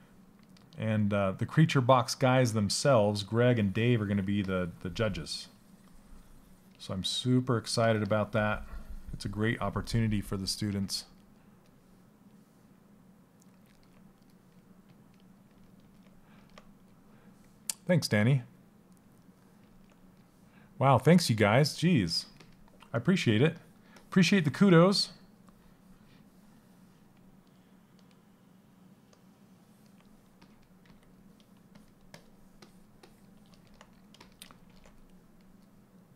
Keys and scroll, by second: 1.9 s.